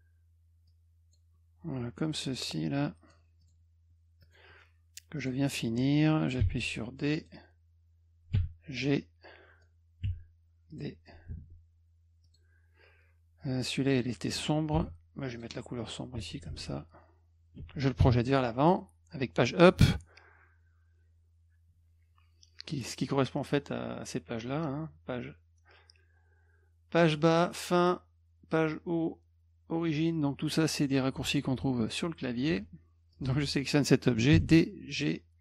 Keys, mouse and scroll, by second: 0.7 click, 2.4 click, 3.4 click, 4.2 click, 5.2 click, 6.4 d, 7.2 click, 8.8 click, 10.1 d, 10.7 click, 11.3 F2, 12.2 click, 14.8 d, 15.3 click, 16.2 F1, 33.1 click, 34.3 d, 34.9 click.